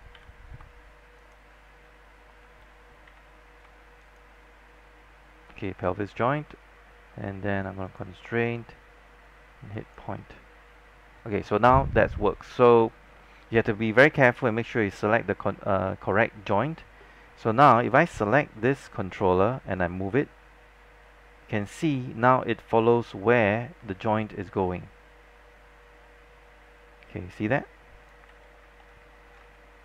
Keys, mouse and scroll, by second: 0.2 w, 1.3 shift+click, 3.2 shift+z, 4.1 shift+click, 6.6-8.0 scroll down 1, 8.0-10.9 drag, 14.2 alt+middle click, 17.9-28.3 drag, 28.3 z, 28.5 scroll down 1, 28.9 alt+middle click.